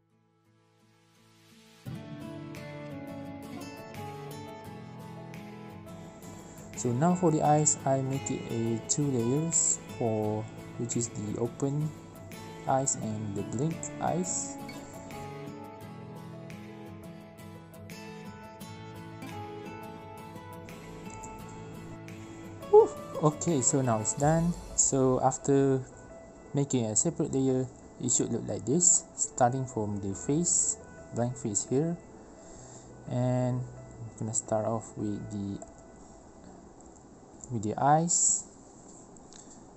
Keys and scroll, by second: 2.6 ctrl+alt+j, 2.9 e, 5.6 i, 5.7 b, 5.9 e, 6.2 ctrl+z, 6.4 ctrl+z, 6.7 ctrl+x, 6.9 ctrl+shift+v, 7.1 ctrl+z, 7.7 ctrl+z, 7.7 b, 7.8 ctrl+z, 8.0 e, 8.3 ctrl+z, 8.4 ctrl+v, 8.6 ctrl+x, 8.8 ctrl+x, 9.1 ctrl+v, 9.1 ctrl+z, 10.1 ctrl+z, 14.7 ctrl+alt+b, 14.9 i, 17.0 ctrl+z, 18.4 ctrl+z, 18.6 ctrl+z, 19.6 ctrl+z.